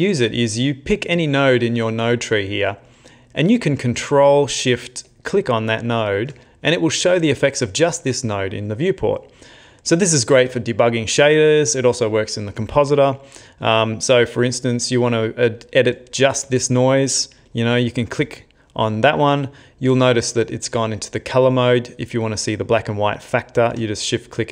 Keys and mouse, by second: 5.3 ctrl+shift+click, 9.9 middle click, 11.3 middle click, 13.5 middle click, 17.7 ctrl+shift+click.